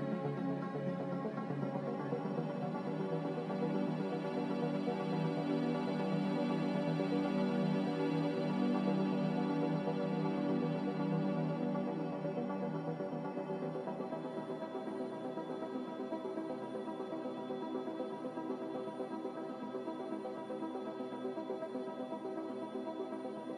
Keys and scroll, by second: 1.7 ctrl+b, 13.9 s, 15.8 Tab, 16.2 5, 16.2 0, 16.5 Return, 19.6 f, 23.0 a.